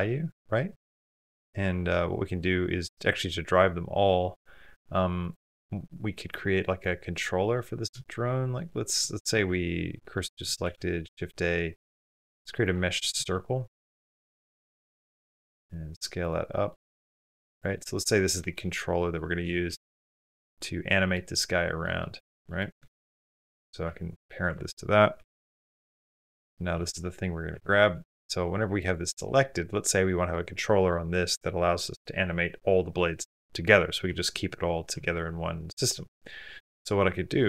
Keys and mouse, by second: 1.1 space, 5.0 click, 6.7 click, 6.9 click, 8.2-9.2 middle drag, 9.2 shift+s, 10.0 middle click, 10.9 shift+a, 15.5 s, 16.3-17.3 middle drag, 17.3 s, 17.6-18.3 middle drag, 18.7-19.5 middle drag, 19.5 g, 20.3 middle click, 21.3-23.2 middle drag, 25.2 ctrl+p, 26.5 g, 34.0 r.